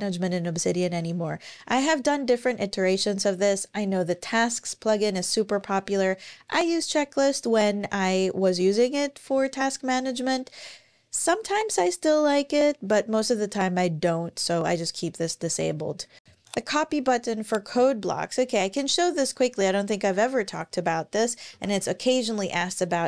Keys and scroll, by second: 19.7 ⟲, 21.3 super+o, 22.7-23.0 typing.